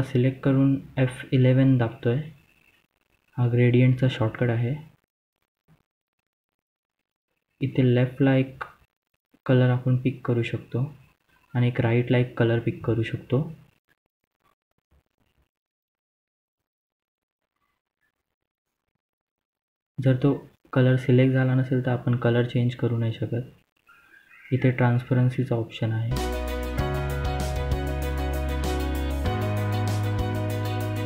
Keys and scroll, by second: 23.4-24.4 typing, 28.4-29.1 typing.